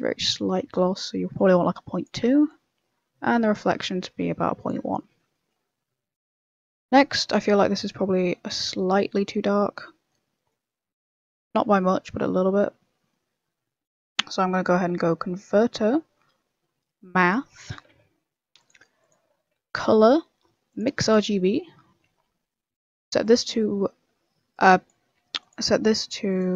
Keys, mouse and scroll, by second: 2.4 click, 4.8-5.7 scroll down 9, 5.3 middle click, 5.9 middle click, 6.2 middle click, 6.5 scroll up 4, 6.7 middle click, 7.1 middle click, 8.3 scroll up 2, 8.4 middle click, 8.9 scroll down 4, 9.3 middle click, 9.7 scroll up 2, 10.3 scroll down 2, 10.4 middle click, 11.4 scroll down 1, 12.9 middle click, 13.4 middle click, 14.4 middle click, 14.7 shift+a, 19.5 shift+a, 22.5 middle click, 23.2 click, 24.5 click, 25.5 click.